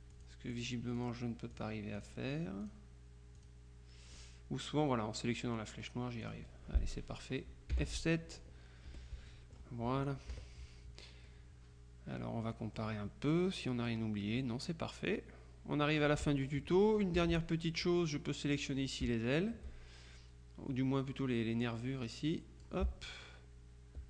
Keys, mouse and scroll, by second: 0.6-1.6 drag, 2.0 click, 2.7 click, 3.4 click, 6.3 click, 7.8 F7, 8.4 click, 9.0 F1, 9.4 click, 10.4 KP_Subtract, 11.3-13.3 drag, 13.3-13.7 scroll up 1, 13.9-17.0 drag, 17.3 F2, 18.6 click, 22.1-23.2 drag.